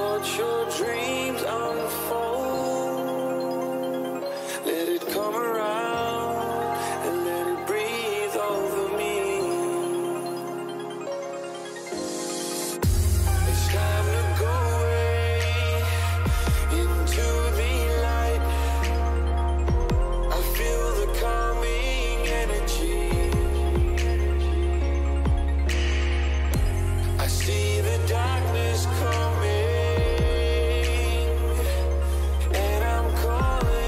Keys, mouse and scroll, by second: 0.2-2.7 right drag, 0.7-2.7 middle drag, 2.7 ctrl+b, 5.6 KP_3, 7.6 ctrl+b, 17.2 a, 18.5 z, 19.5 z, 19.9-25.4 middle drag, 25.4-28.9 drag, 26.3 a, 26.7 a, 28.9 k.